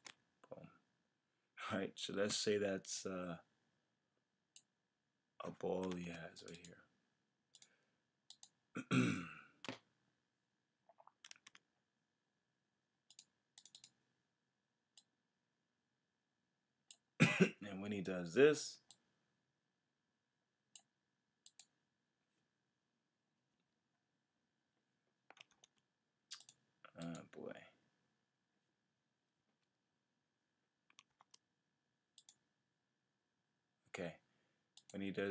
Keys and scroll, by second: 5.9 super+z, 11.3 super+z, 23.6 F6, 25.5 super+z, 29.4 F5, 31.1 super+z.